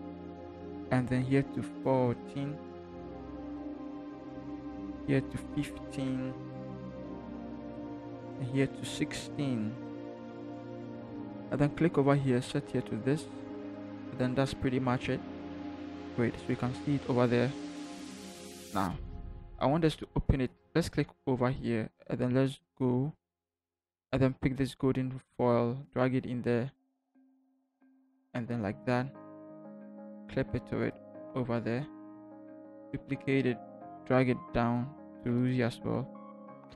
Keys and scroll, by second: 2.8 1, 3.5 4, 6.1 1, 9.3 1, 9.8 6, 29.2 Return.